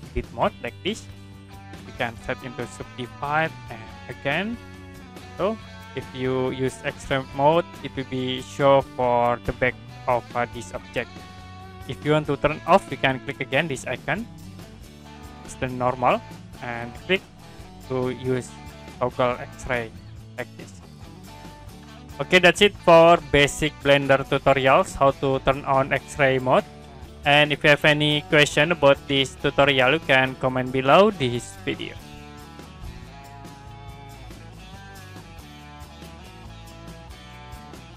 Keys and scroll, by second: 32.5 Print.